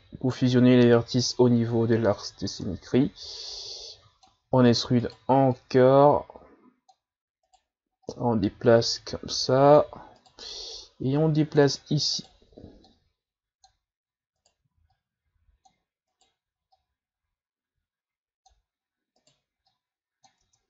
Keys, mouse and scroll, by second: 0.6-1.8 scroll down 7, 1.8-2.4 scroll up 4, 2.4-3.2 scroll up 2, 3.5-4.7 drag, 4.7 e, 5.5-7.5 drag, 7.5 right click, 8.0-10.2 drag, 10.2 right click, 10.8-12.2 drag, 12.2 right click, 12.8 click, 14.4 right click, 14.9-16.1 drag, 16.1 right click, 16.8-19.2 drag, 19.2 right click, 19.7 click, 20.4 Tab.